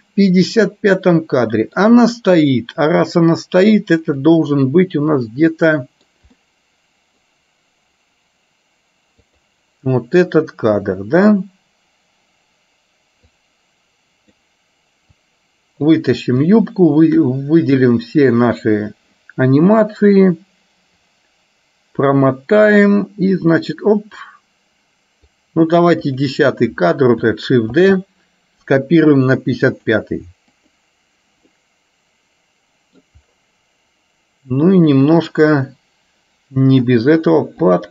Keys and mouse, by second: 4.3 click, 5.3 middle click, 6.5 middle click, 9.4 click, 13.6-14.6 drag, 15.3-16.3 drag, 21.3-25.5 drag, 26.1 click, 28.0 shift+d, 30.8 click, 31.5-33.1 middle drag, 35.0 click, 35.4-36.9 middle drag, 37.8 click.